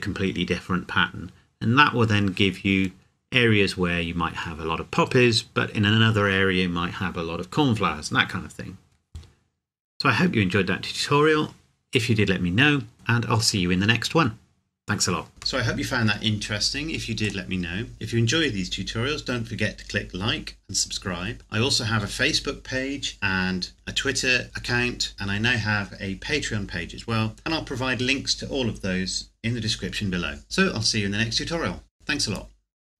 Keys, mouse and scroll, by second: 9.4 scroll down 1.